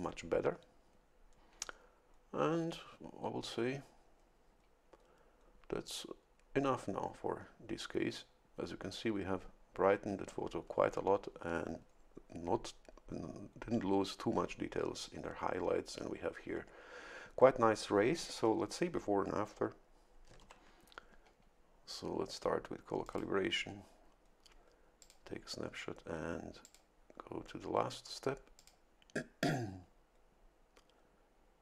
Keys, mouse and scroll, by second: 20.4 ctrl+shift+l, 23.0 click, 25.0 click, 26.6 click, 28.6 click.